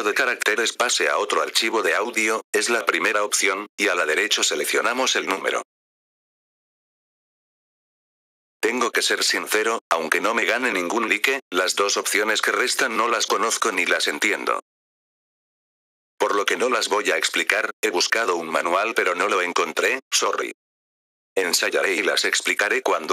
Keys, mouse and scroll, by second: 0.3 click, 1.2-2.9 drag, 3.9-6.8 drag, 7.6 F4, 8.5-10.3 drag, 10.8-13.1 drag, 20.9 F4, 21.3-22.4 drag.